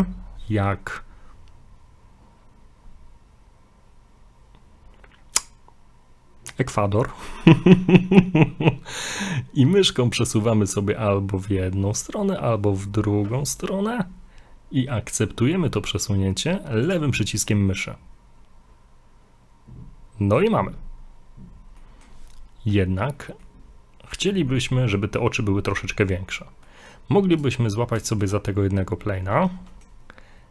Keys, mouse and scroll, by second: 17.7 middle click, 21.8 middle click, 22.7-23.3 scroll up 1, 23.4 middle click, 24.5 middle click, 26.7 middle click, 27.4 right click, 28.1 shift+middle click, 28.4 scroll up 2, 29.7 middle click.